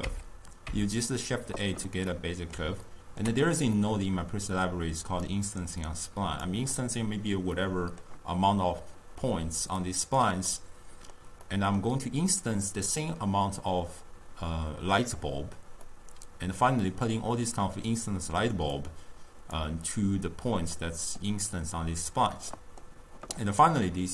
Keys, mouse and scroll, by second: 0.1 Tab, 0.8 Tab, 2.2-5.3 middle drag, 5.3 click, 7.6-9.9 middle drag, 9.9-10.5 drag, 10.5-14.6 middle drag, 15.9-18.8 middle drag, 18.8 click, 20.8-24.1 middle drag.